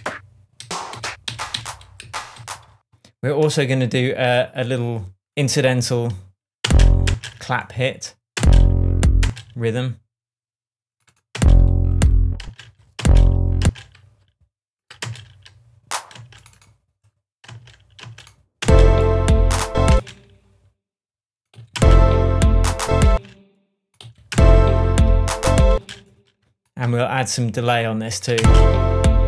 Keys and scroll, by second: 0.5 Up, 2.0 Down, 2.3 Up, 6.6 space, 8.3 space, 11.3 space, 12.6 Right, 12.9 space, 14.2 super+space, 15.0 super+space, 15.9 space, 17.4 space, 19.9 space, 21.5 Right, 21.7 space, 23.0 space, 24.0 Right, 24.3 space, 25.6 space, 28.3 alt+space.